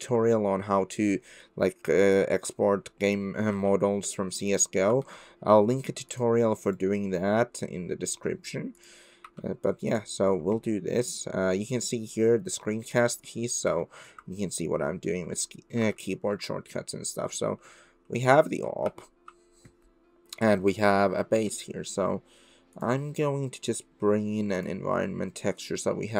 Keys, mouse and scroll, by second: 2.1 click, 3.1 click, 3.5 x, 4.9 s, 9.2 g, 12.6 middle drag, 13.8-14.2 shift+middle drag, 14.3-14.6 middle drag, 15.9 shift+middle drag, 18.8 z, 20.4-20.9 middle drag, 20.9 drag, 21.5 click, 22.8 click, 23.6-24.8 middle drag.